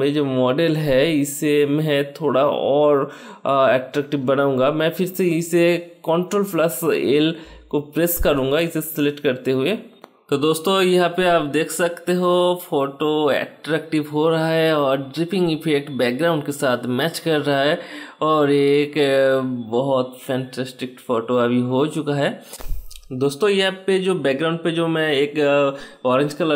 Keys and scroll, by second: 5.5 ctrl+l.